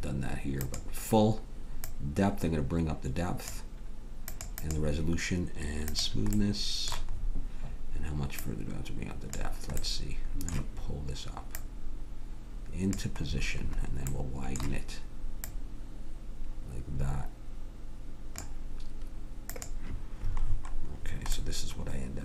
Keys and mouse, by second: 1.8-6.7 drag, 13.3-15.5 middle drag, 15.5-17.3 drag, 19.5-20.6 drag, 20.6 middle click, 21.5 click.